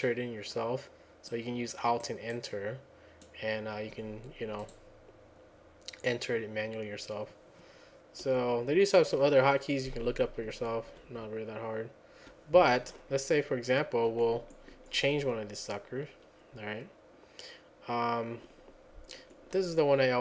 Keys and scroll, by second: 8.2 F10, 8.7 F10, 10.0 F10, 10.3 F10, 10.5 F10, 10.9 F9, 11.1 F9, 11.3 F9, 11.8 F9, 11.8 F9, 11.9 F9, 11.9 F9, 12.0 F9, 12.1 F9, 14.1 Down, 14.4 Down, 14.8 Down, 19.0 Down.